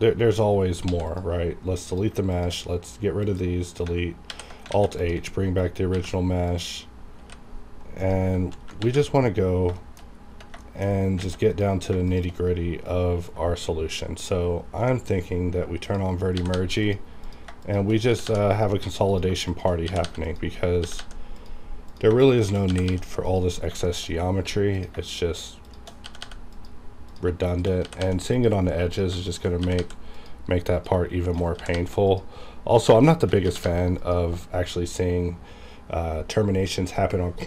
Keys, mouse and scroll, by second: 1.1 click, 1.1 click, 2.3 shift+click, 2.6 shift+right click, 3.2 click, 4.3 alt+h, 4.7 alt+a, 5.0 click, 5.9 g, 6.5 click, 7.2 h, 7.9 click, 8.7 KP_7, 9.4 scroll up 1, 9.8 shift+middle click, 10.0 shift+scroll up 2, 10.6 shift+middle click, 11.2 alt+a, 11.4 click, 12.1 shift+click, 15.9 click, 16.3 g, 16.6 g, 16.8 click, 18.1 g, 18.2 g, 18.5 click, 19.9 g, 20.0 g, 20.2 click, 20.7 g, 21.0 g, 21.4 click, 22.4 shift+click, 22.7 g, 22.9 g, 23.3 click, 23.6 scroll down 1, 23.9 shift+middle click, 24.1 scroll up 1, 24.7 click, 24.9 click, 25.7 shift+click, 26.0 g, 26.2 g, 26.5 click, 27.5 shift+click, 27.8 g, 28.0 g, 28.3 click, 29.3 shift+click, 29.6 g, 29.8 g, 30.1 click, 31.1 shift+click, 31.5 g, 31.7 g, 32.1 click, 33.1 shift+click, 33.4 g, 33.6 g, 34.0 click.